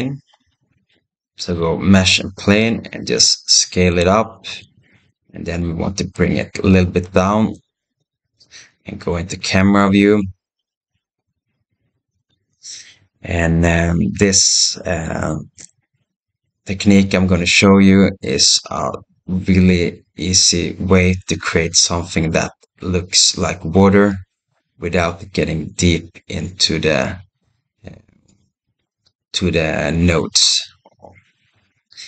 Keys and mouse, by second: 2.5 s, 5.0-5.5 middle drag, 6.0 g, 9.1 KP_0, 10.6 s.